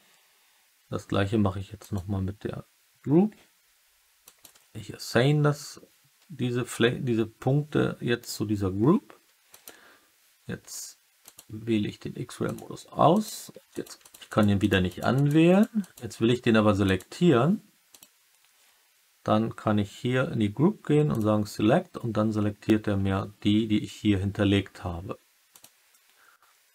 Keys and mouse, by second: 1.7 click, 4.2 click, 9.5-12.3 drag, 12.4-14.3 drag, 14.8 click, 15.1 click, 15.4 click, 15.7 click, 17.9 click, 21.0 click, 25.4 click.